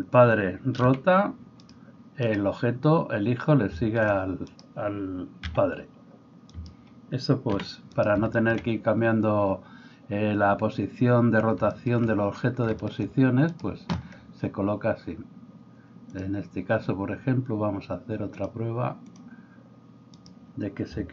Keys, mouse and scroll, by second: 0.8 r, 2.3-3.8 drag, 3.8 shift+middle click, 4.5 click, 5.4-13.5 middle drag, 5.5 g, 7.6 r, 13.5-16.1 right drag, 16.1-21.1 drag, 20.1 middle click, 20.1 right click.